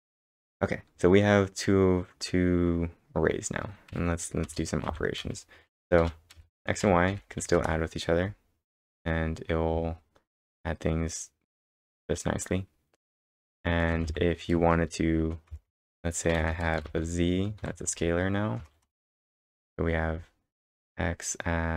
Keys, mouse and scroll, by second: 1.8 scroll up 1, 2.1 scroll down 2, 3.9 b, 4.5 Return, 4.9 x, 5.2 space, 6.3 space, 7.1 y, 7.6 ctrl+Return, 8.4-9.2 typing, 8.7 scroll down 2, 9.1 scroll up 2, 12.5 scroll down 1, 13.4 b, 13.9 Return, 14.1 x, 14.5 space, 16.4-17.6 typing, 17.9 Return, 18.8 ctrl+Return.